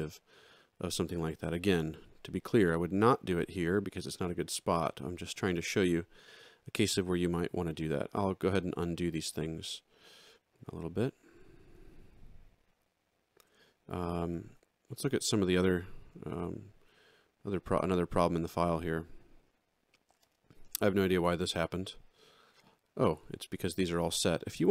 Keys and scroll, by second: 6.2 ctrl+3, 8.0 ctrl+z, 14.5 ctrl+z.